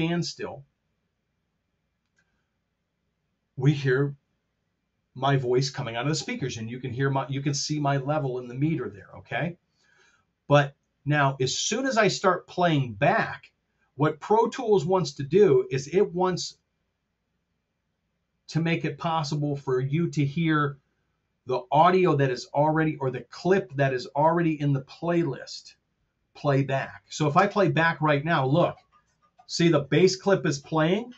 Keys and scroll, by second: 27.3 space.